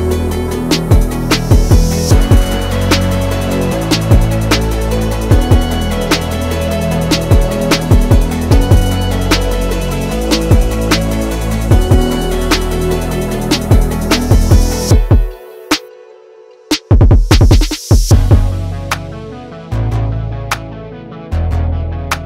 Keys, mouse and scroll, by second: 1.8 alt+shift+click, 3.9 ctrl+c, 4.2 ctrl+f, 4.9-22.2 alt+shift+drag.